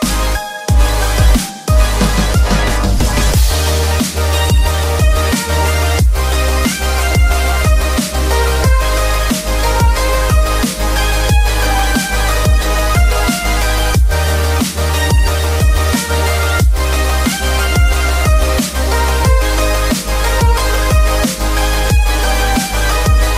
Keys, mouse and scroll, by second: 0.3-1.0 scroll up 1, 1.5 ctrl+r, 2.4 right click, 3.8 Tab, 4.9-6.3 drag, 6.8 scroll down 1, 7.5 KP_1, 8.0 click, 8.3-9.6 scroll up 3, 9.6 scroll down 1, 16.4 click, 17.3 Tab, 18.5 click, 19.5 click, 20.6 b.